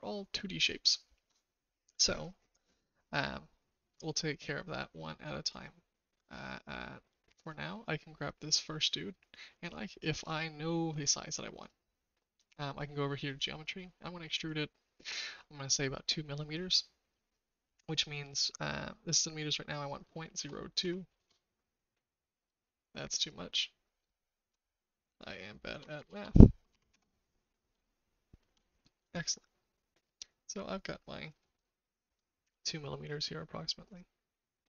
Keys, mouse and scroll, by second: 4.2 shift+middle click, 11.5 click, 14.4-22.2 drag, 23.1-27.4 drag, 26.1 KP_0, 27.8 shift+middle click, 29.1-31.3 shift+middle drag, 32.9-34.6 shift+middle drag.